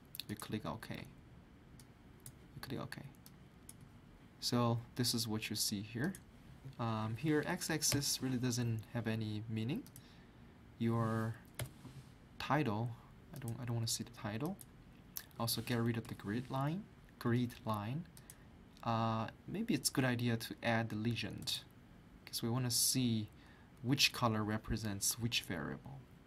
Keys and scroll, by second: 7.9 Delete.